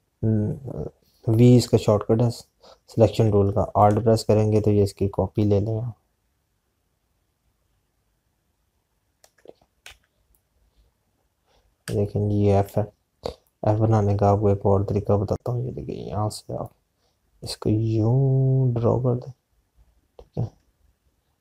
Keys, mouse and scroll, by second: 5.6 alt+click, 11.0 z, 11.2 click, 13.9 space, 15.2 click.